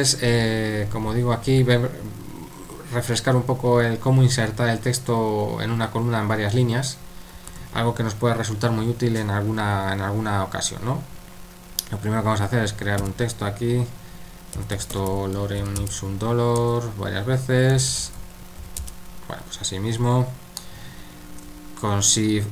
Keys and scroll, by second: 7.6 super+3, 13.0 typing, 14.3-15.6 typing, 16.6 Return, 17.5-19.1 typing, 19.8 Escape.